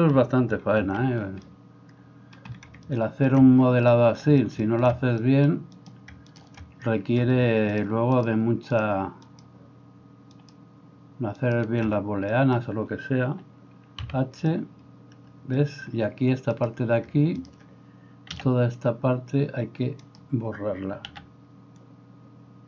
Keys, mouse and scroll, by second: 0.7 alt+h, 5.8 right click, 6.2-8.2 shift+middle drag, 8.2 shift+right click, 8.4-9.4 shift+middle drag, 9.4-11.6 shift+right drag, 11.6-17.4 shift+middle drag, 14.1 h, 17.4 shift+right click, 17.6-22.6 middle drag, 18.3 c, 21.1 c.